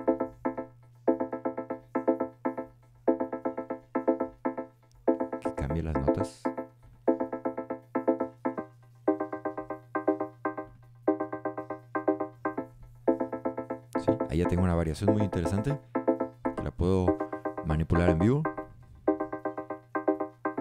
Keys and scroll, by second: 0.0 super+a, 2.6 Up.